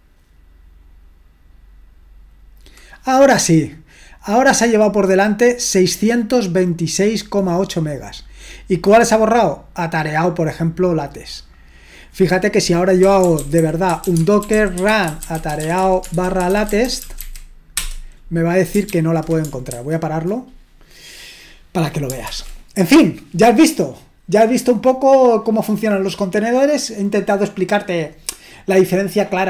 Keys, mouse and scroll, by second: 4.9-8.5 drag, 10.0-12.1 drag, 12.8-17.7 typing, 17.7 Return, 18.9 ctrl+super+c, 19.7 ctrl+c, 22.3 ctrl+l.